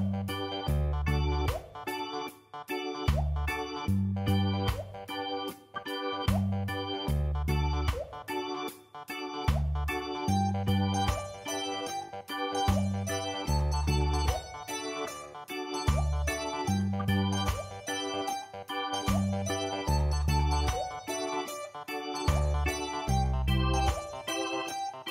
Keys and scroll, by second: 24.1 m.